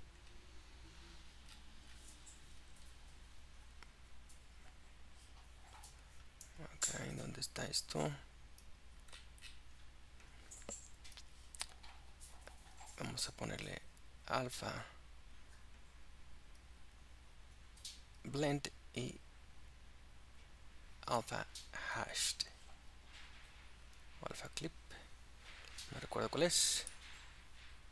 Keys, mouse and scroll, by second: 6.9 click, 11.2-13.5 scroll down 10, 14.8-20.0 drag, 24.8 click, 26.4-26.9 scroll down 3, 26.9-27.9 middle drag.